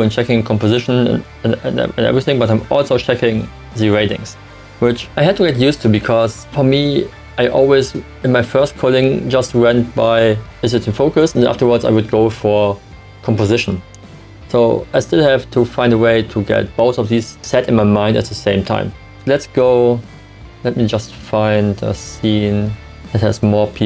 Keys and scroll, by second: 0.6 Right, 1.4 Left.